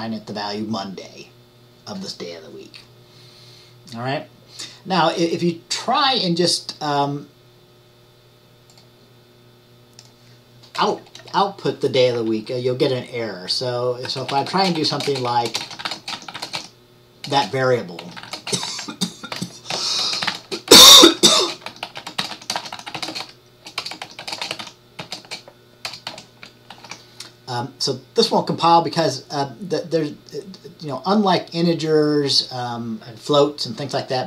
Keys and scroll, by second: 11.2 typing, 13.9-24.9 typing.